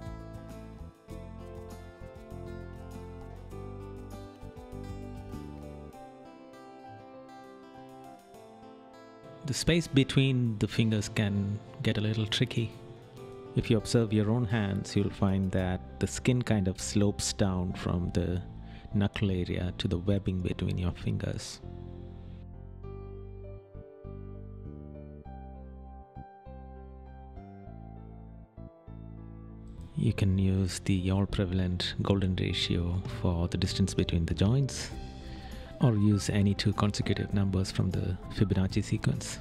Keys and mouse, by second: 1.9 right click, 5.9 right click, 7.8 right click, 15.6 right click, 16.3 right click, 18.7 right click, 21.4 right click, 23.1 right click, 23.7 right click, 24.2 right click, 25.3 right click, 27.4 right click, 29.6 right click, 32.8 right click, 34.5 right click, 37.1 right click.